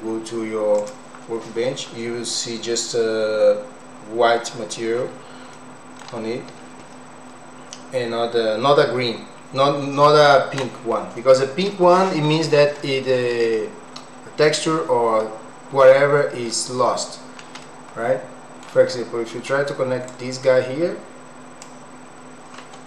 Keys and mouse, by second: 13.6 click, 17.7 middle click, 20.3-21.9 drag.